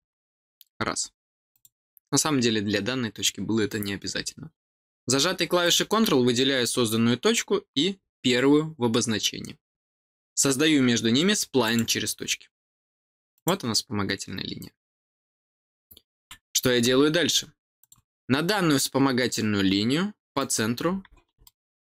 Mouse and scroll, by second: 1.5 click, 5.6 click, 7.9 middle click, 7.9 scroll up 2, 8.3 middle click, 8.3 scroll down 2, 11.6 click, 13.3 click, 17.7 click, 20.3 click, 21.4-21.9 middle drag.